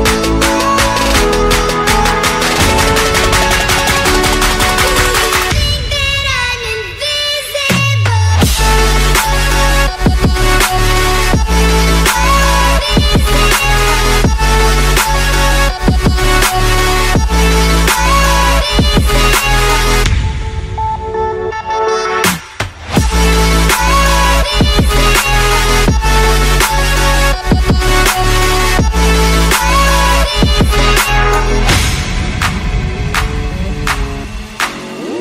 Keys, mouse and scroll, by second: 0.0-2.1 typing, 2.3 Tab, 2.7 Return, 4.0 click, 5.3 click, 5.9 click, 7.4 click, 7.6 click, 7.8 z, 9.4 click, 10.3 click, 10.8 click, 12.1 click, 13.3 click, 14.3 ctrl+click, 15.9 click, 16.4 click, 17.5 click, 19.9 click, 21.3 click, 22.4 click, 23.8-24.7 typing, 25.9 middle click, 26.1 middle click, 26.7 middle click, 28.1-29.1 typing, 33.0-33.9 typing.